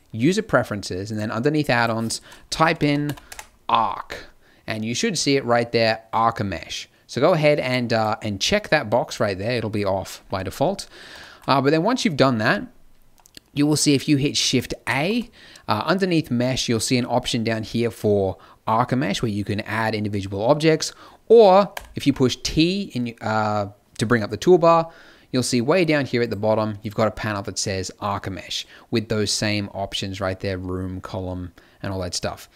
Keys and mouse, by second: 10.5-14.8 middle drag, 14.8 shift+a, 21.7 t, 24.9-28.0 middle drag, 28.0-32.5 drag.